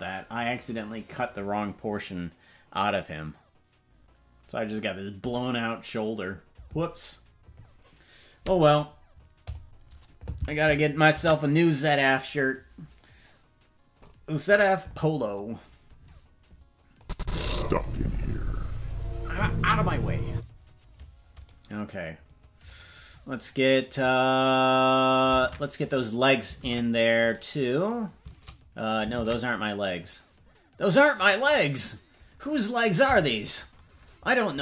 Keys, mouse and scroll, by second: 13.6 ctrl+s, 17.0 click, 17.2 space, 20.3 space, 21.5 right click, 22.9 right click, 25.4 ctrl+Tab, 25.9 right click, 26.6 ctrl+Tab, 27.3 right click, 29.2 ctrl+Tab, 31.2 right click.